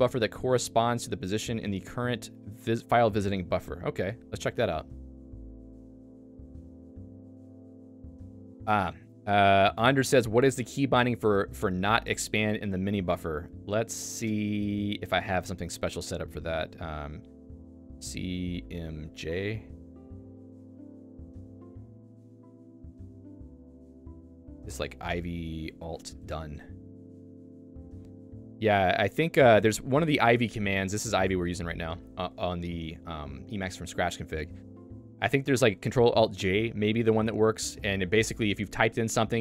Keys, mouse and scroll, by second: 9.3 click, 12.7 click, 17.3 /, 18.0 shift+c, 18.2 -, 19.9 Return, 20.3 n, 21.5 n, 24.5-26.8 typing, 26.9 Return, 27.8 j.